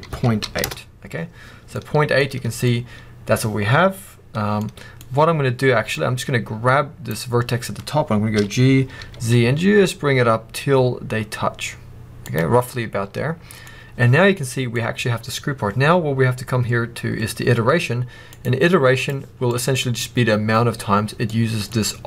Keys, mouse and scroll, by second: 0.6 Return, 1.6 middle click, 2.1-2.5 scroll up 2, 2.5 middle click, 5.8 click, 7.6-8.2 scroll up 1, 8.2 g, 12.2 click, 12.4 scroll down 1, 12.7-14.0 middle drag, 15.2-18.2 scroll up 2, 18.2-19.4 drag, 19.2 scroll down 2, 19.4 middle click, 21.5-22.0 middle drag, 21.5-22.0 scroll up 2.